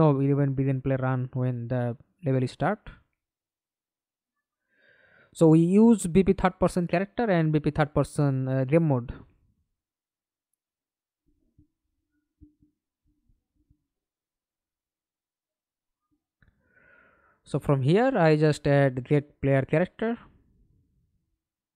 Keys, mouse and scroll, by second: 10.1 middle click, 12.1 right click, 12.5-13.9 scroll up 1, 13.9 right click, 14.7-17.5 typing, 17.5 Return.